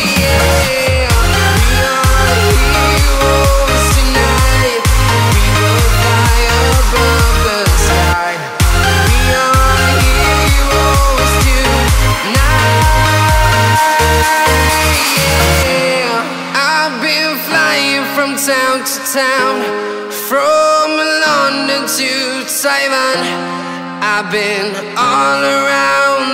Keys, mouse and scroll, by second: 1.2-1.7 scroll down 1, 2.6 click, 4.2 scroll up 1, 6.2 scroll up 1, 10.3 alt+Num_Lock, 10.3-10.8 scroll up 1, 12.7 alt+click, 13.3-13.7 scroll down 1, 14.6 scroll up 1, 15.4 click, 15.6 scroll down 1, 15.9 right click, 16.6 scroll down 1, 17.0 right click, 17.6-18.2 scroll up 1, 17.6 typing, 18.5-19.3 scroll down 1, 20.2 scroll up 1, 20.7 click, 20.7 typing, 21.1-21.6 scroll up 1, 22.0 right click, 23.5 click, 24.7-25.0 scroll down 1.